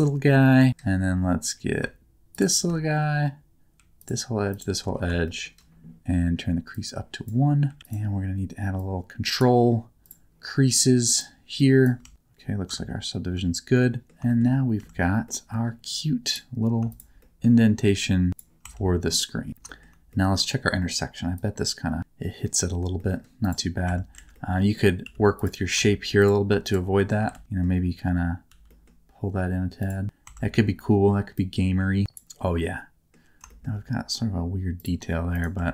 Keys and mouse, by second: 2.3 shift+click, 4.0 alt+shift+click, 5.2 shift+middle click, 6.8 click, 7.8 alt+z, 8.9 click, 11.3 click, 11.3 right click, 12.0 Tab, 12.7 Tab, 13.3 Tab, 13.7 middle click, 14.3 middle click, 15.2 middle click, 16.9 click, 17.2 middle click, 18.3 click, 18.6 Tab, 19.2 middle click, 19.7 middle click, 20.1 middle click, 21.3 click, 22.0 middle click, 23.0 middle click, 23.8 Tab, 24.1 alt+z, 24.3 middle click, 25.0 2, 25.4 click, 27.0 shift+middle click, 27.3 alt+z, 28.5 g, 29.8 click, 30.2 Tab, 31.3 click, 32.6 middle click, 33.5 shift+middle click, 35.6 Tab.